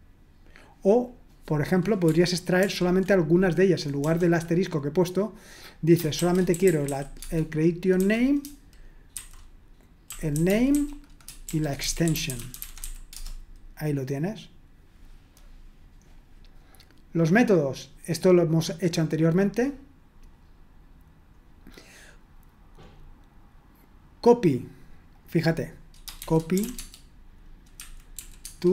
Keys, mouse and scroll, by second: 0.2-1.1 scroll down 1, 1.1 click, 2.6 ctrl+p, 4.0 BackSpace, 6.4-8.0 typing, 9.1-13.3 typing, 16.1-17.0 scroll down 1, 17.0-17.7 scroll down 1, 17.7-18.0 scroll down 1, 18.5-19.3 scroll down 2, 19.3-21.4 scroll down 1, 22.9-23.8 scroll up 2, 25.1-26.6 drag, 26.4-28.7 typing, 28.4 Tab.